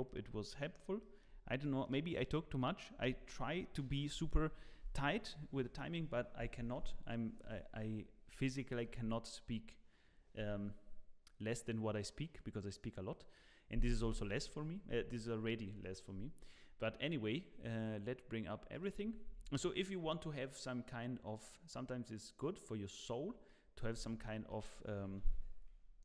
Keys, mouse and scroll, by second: 1.0 shift+middle click, 1.5 scroll down 2, 1.6 middle click, 2.1 click, 15.8 middle click, 18.7 click, 23.0 click, 23.4 middle click, 23.9 scroll down 4, 24.2 click, 24.5 middle click, 25.2 ctrl+s.